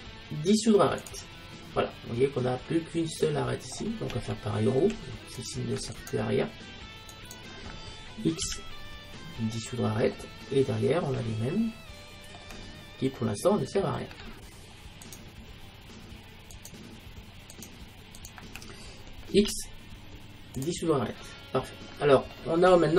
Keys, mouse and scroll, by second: 2.0-7.5 middle drag, 7.5-9.0 right drag, 8.5 x, 10.2 middle click, 15.1-20.2 right drag, 19.4 x, 21.2 middle click.